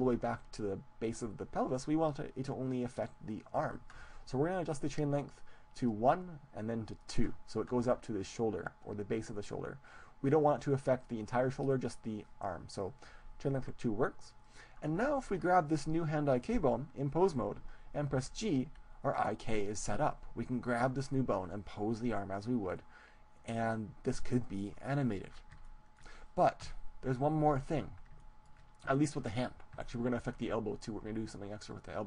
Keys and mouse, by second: 5.8-9.0 drag, 14.4-16.4 right drag, 18.7 g, 24.4-26.4 drag, 26.2 middle click, 26.6 KP_1, 27.4 middle click, 30.0 middle click.